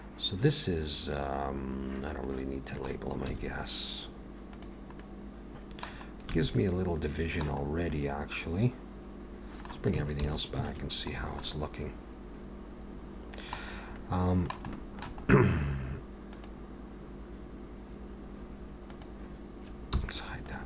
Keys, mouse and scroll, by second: 1.4-2.3 scroll down 2, 2.3 middle click, 3.3 z, 5.0 middle click, 6.3 alt+a, 6.5 middle click, 7.6-8.3 scroll up 2, 7.9 middle click, 10.2 alt+h, 10.7 alt+a, 11.2 scroll down 2, 11.4 middle click, 14.0 middle click, 14.0 scroll up 1, 14.7 shift+middle click, 15.2-16.3 scroll up 1, 16.3 click, 16.3 scroll up 1, 18.9 click, 19.9 h, 20.4 click.